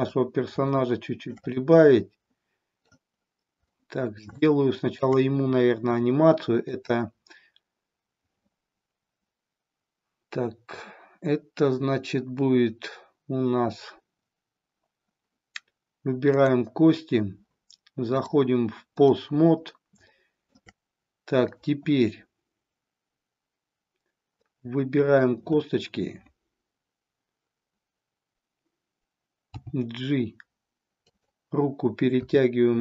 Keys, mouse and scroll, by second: 0.9 shift+middle click, 1.5-2.9 middle drag, 3.8-4.3 middle drag, 4.4-5.0 shift+middle drag, 6.8-15.0 drag, 16.4 click, 18.1-19.1 drag, 20.1-20.7 shift+middle drag, 21.5-23.8 drag, 24.4-25.2 middle drag, 29.5 g, 31.1 click, 32.3 r.